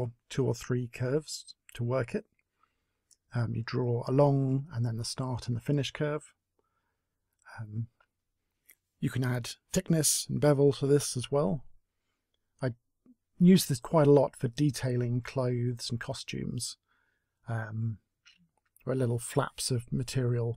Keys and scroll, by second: 3.4-4.9 typing, 7.6 w, 8.3 e, 8.7 r, 11.0 w, 12.3 e, 13.6 w, 17.3 space.